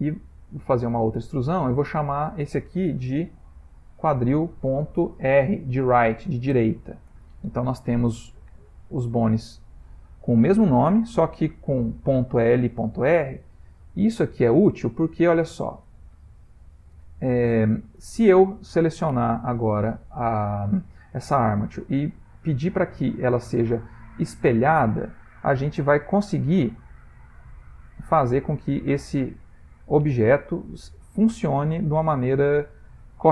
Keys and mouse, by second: 0.4 e, 2.2 click, 3.3 F2, 5.2 BackSpace, 5.4 BackSpace, 8.5 ctrl+middle click, 13.6-14.2 ctrl+middle click, 14.2 shift+middle click, 15.3 click, 15.7 g, 27.5 middle click.